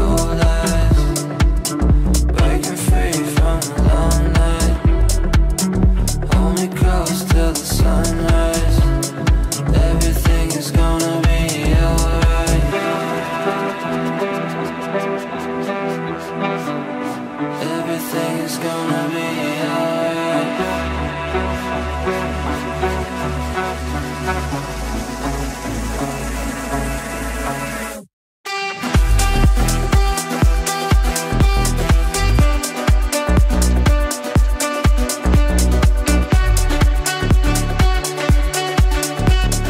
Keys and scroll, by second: 17.9 g.